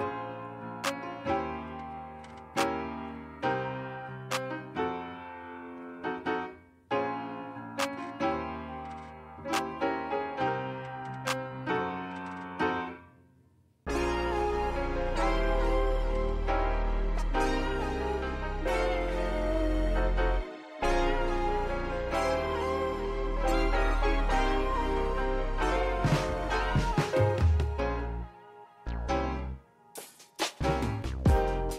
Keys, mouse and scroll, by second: 0.0 BackSpace, 0.1 BackSpace, 0.2 8, 0.5 Tab, 0.8 s, 2.0 click, 2.2 s, 3.3 click, 3.5 s, 4.6 g, 5.5-6.8 scroll down 6, 6.2 click, 6.8 scroll up 4, 7.1 click, 8.5 shift+click, 8.7 s, 10.1 g, 12.2 ctrl+z, 12.4 ctrl+z, 12.8 shift+click, 13.2 g, 13.9 s, 15.4-16.0 scroll down 3, 16.0 s, 16.5 scroll up 3, 16.6 g, 17.4 g, 18.2-18.8 scroll down 2, 18.8 drag, 18.9 scroll down 2, 19.2-19.7 shift+middle drag, 19.7 shift+right click, 19.8 shift+a, 21.0 s, 22.0-22.4 scroll up 1, 22.4 g, 23.7 g, 25.5 click, 26.1 click, 26.2-26.7 scroll up 2, 26.7 g, 27.5-27.9 shift+middle drag, 27.9 Tab, 28.0 click, 28.3 middle click, 28.7 click, 29.0 KP_0, 29.5 g, 30.9 shift+z, 31.0 click, 31.3 KP_0.